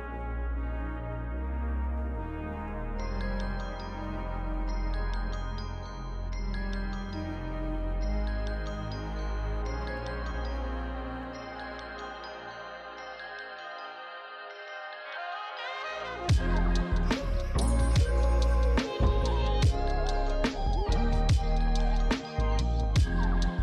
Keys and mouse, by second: 0.0 alt+shift+click, 0.5 ctrl+z, 0.6 alt+shift+click, 1.7 click, 2.7 shift+click, 3.1 ctrl+z, 3.7 ctrl+z, 6.9 ctrl+Num_Lock, 6.9 ctrl+click, 10.6 click, 10.8 alt+shift+click, 11.7 click, 12.9 click, 13.5 shift+d, 13.7 right click, 14.2 click, 14.9 Tab, 15.0 click, 16.3 Tab, 16.8 alt+shift+click, 17.8 alt+shift+click, 19.2 click, 19.8 click, 20.5 shift+click, 22.4 click.